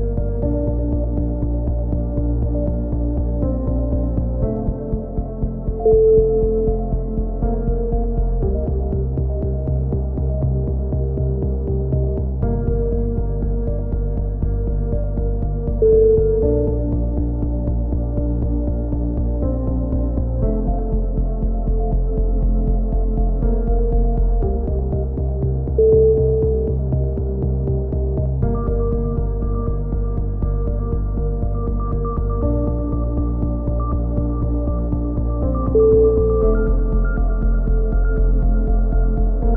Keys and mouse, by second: 1.0-2.2 drag, 2.6 a, 3.1 click, 3.8 c, 5.5-6.6 drag, 10.0 c, 10.8-12.2 drag, 15.9 a, 16.2 z, 16.6 click, 17.1 z, 18.2 ctrl+r, 19.5-20.5 drag, 19.8 a, 20.4 c, 21.3-22.5 drag, 21.6 right click, 24.1 a, 24.4 z, 24.8 Tab, 25.0 middle click, 25.6 click, 26.6 KP_3, 26.6 middle click, 27.1 z, 27.6-29.0 drag, 28.7 Tab, 29.6 ctrl+r, 33.4 a, 34.6 c, 35.5 click, 36.3 s, 37.4-39.5 drag.